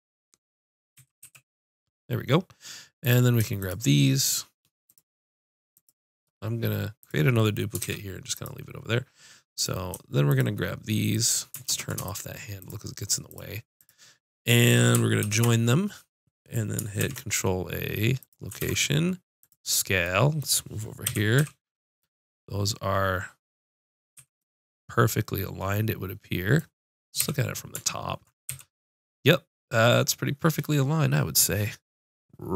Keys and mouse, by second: 1.0 x, 3.0-15.1 drag, 7.8 shift+d, 11.7 ctrl+space, 15.2 ctrl+j, 17.0 ctrl+a, 18.8 ctrl+a, 21.1 KP_5, 21.4 z, 24.2 z, 27.2 KP_7, 28.5 KP_5.